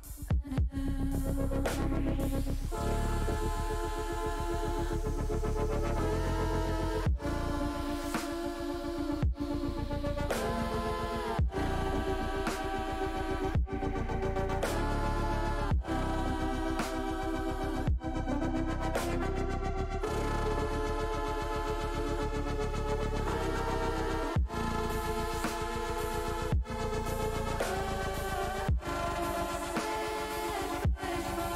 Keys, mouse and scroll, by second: 0.6 shift+middle click, 2.9 ctrl+r, 11.3 middle click, 14.4-15.8 middle drag, 17.0 shift+click, 17.5 shift+click, 19.1 middle click, 20.8 middle click, 24.2 click, 29.4 e, 29.5 s, 30.4 click.